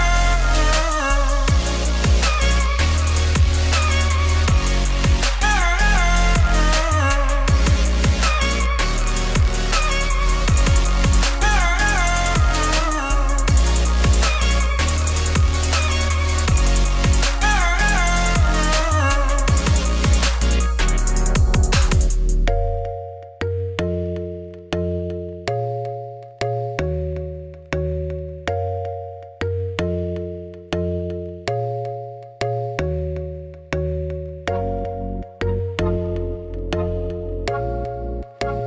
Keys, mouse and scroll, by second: 0.0 middle click, 0.5 g, 1.8 KP_7, 2.4 z, 2.5 scroll up 3, 3.3 g, 4.4 Tab, 4.5 s, 5.5 ., 5.8 s, 7.3 Tab, 7.5 g, 10.5 Tab, 10.7 s, 12.8 middle click, 13.3 e, 15.6 KP_3, 16.0 scroll down 2, 16.2 shift+middle click, 16.4 scroll up 2, 16.6 Tab, 18.3-22.4 drag, 22.4 g, 23.4 g, 24.6 middle click, 24.7 scroll down 2, 24.9 middle click, 25.0 z, 25.4 z, 25.6 z, 25.9 z, 26.1 middle click, 26.3-27.1 scroll up 2, 27.1-30.6 shift+drag, 30.6 middle click, 31.2 KP_1, 31.6 alt+d, 33.8-34.9 middle drag, 34.9-36.7 drag, 36.9 scroll down 4, 37.2 click, 38.1-38.6 shift+drag.